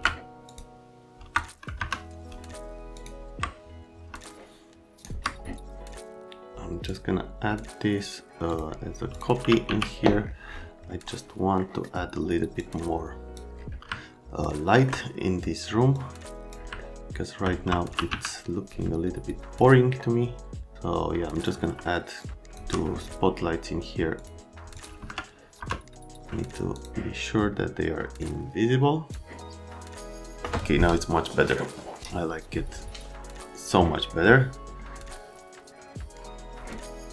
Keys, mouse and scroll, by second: 0.5 middle click, 1.8 F3, 2.9 ctrl+middle click, 4.2 shift+middle click, 6.9 middle click, 8.5 middle click, 9.1 middle click, 9.4 t, 9.6 z, 11.6 middle click, 12.5 click, 13.9 alt+middle click, 15.9 click, 16.8 alt+middle click, 17.6-18.6 typing, 20.0 right click, 20.7 click, 22.2 shift+click, 24.1 click, 24.8 click, 24.9 c, 25.6 F3, 26.7 click, 28.2 click.